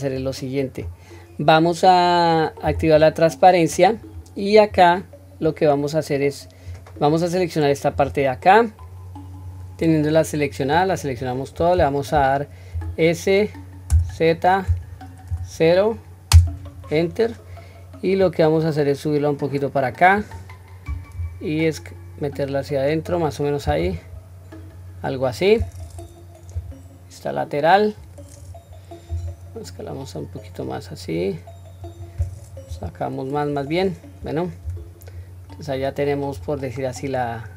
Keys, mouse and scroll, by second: 6.7-7.9 drag, 9.5-10.7 drag, 18.3-20.1 drag, 21.1 s, 26.5 KP_3, 29.1 s, 32.7 KP_1, 34.6 Tab, 35.4 scroll down 1, 36.3-37.1 scroll down 3.